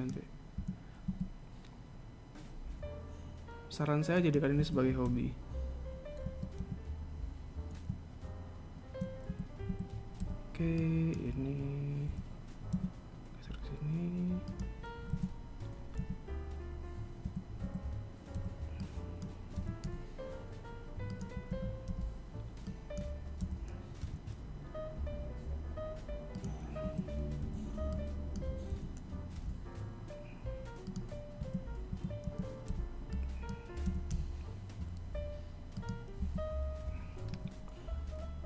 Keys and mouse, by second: 4.8 a, 5.3 b, 6.8 KP_1, 9.5 a, 9.9 a, 10.4 b, 16.2 KP_3, 17.4 a, 17.8 a, 18.5 b, 21.5 a, 22.1 b, 27.0 a, 27.6 b, 31.6 a, 32.1 a, 32.4 a, 32.9 b, 36.4 a, 37.5 KP_1.